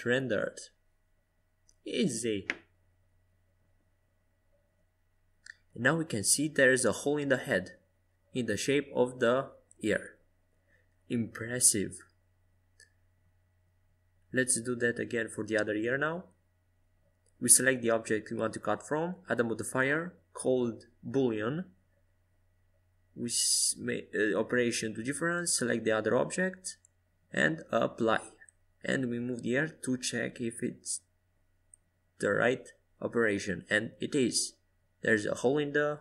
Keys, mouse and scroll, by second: 5.0 ctrl+z, 5.9-8.4 middle drag, 8.6 KP_5, 9.0 KP_1, 10.0 KP_3, 11.0 KP_5, 13.2-15.3 right drag, 14.6-16.8 drag, 19.2-23.3 drag, 25.2-27.5 drag, 29.2 KP_1, 30.7-33.1 right drag, 31.7-33.1 drag, 33.9-35.8 middle drag, 34.8 ctrl+z.